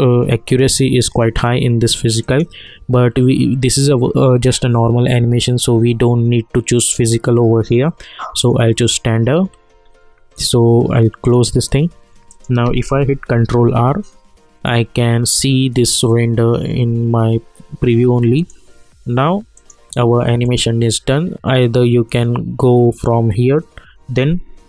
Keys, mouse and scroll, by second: 2.2 click, 8.4 click, 11.2 click, 13.3 ctrl+r, 18.3 click.